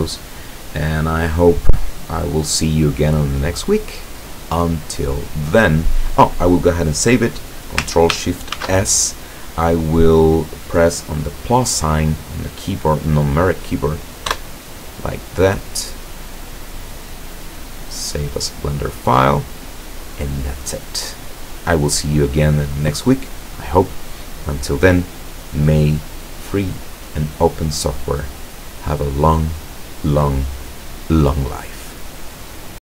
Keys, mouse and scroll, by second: 8.6 ctrl+shift+s, 14.4 KP_Add, 18.0 click.